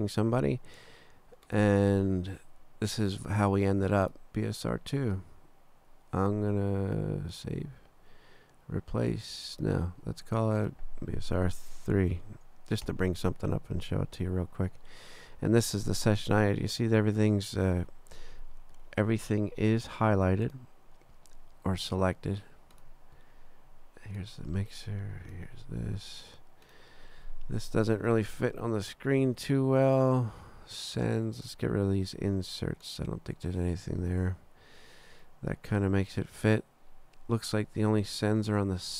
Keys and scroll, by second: 11.5 BackSpace, 12.1 3, 12.8 Return.